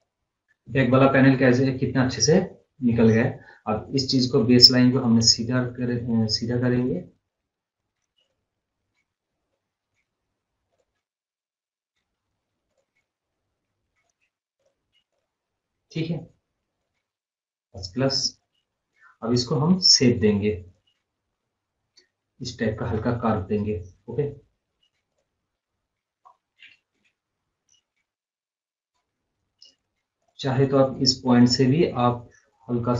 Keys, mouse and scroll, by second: 0.3 scroll down 1, 1.1-1.5 scroll up 2, 2.4 scroll down 1, 8.3 click, 11.3 scroll up 1, 12.7 click, 14.1 right click, 14.6 click, 15.3 click, 15.4 scroll up 1, 15.6 scroll down 1, 16.8 click, 18.1 scroll up 1, 18.2-18.5 scroll down 1, 18.5-18.9 scroll up 1, 20.7 click, 21.4 scroll up 1, 21.7-22.2 scroll down 1, 25.2 click, 25.6 scroll up 1, 25.7 scroll down 1, 26.1 scroll up 1, 27.0 m, 27.4 scroll down 1, 29.7 right click, 30.3 click, 31.5 click.